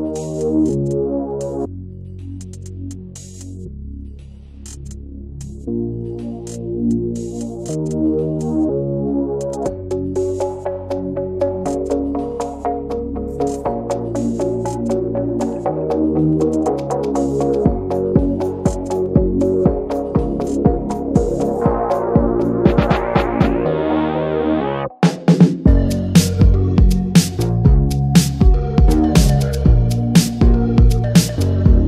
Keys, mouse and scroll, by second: 1.4-3.8 drag, 3.8-4.2 scroll up 1, 4.2-6.3 shift+middle drag, 6.3-8.1 drag, 10.4-14.3 drag, 14.3-24.2 right drag, 24.2 shift+f, 26.9-30.3 drag, 30.3 right click, 30.6-31.8 middle drag, 31.8 scroll down 1.